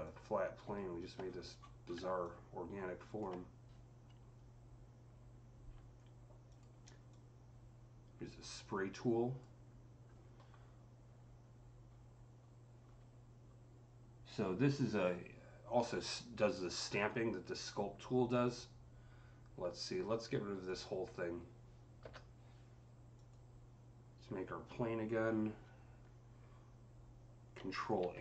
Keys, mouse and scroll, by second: 1.1 scroll, 1.5 scroll, 1.6 scroll down 8, 2.1-5.7 alt+drag, 6.3 alt+click, 6.3 scroll down 1, 6.9-10.6 alt+drag, 10.5-11.0 scroll down 3, 11.7-13.3 scroll down 7, 13.3-13.6 scroll down 1, 20.5 click, 20.5 scroll down 1, 23.0 click, 23.0-23.7 scroll down 1, 27.5 click, 27.5-27.9 scroll down 1, 27.9 ctrl+a.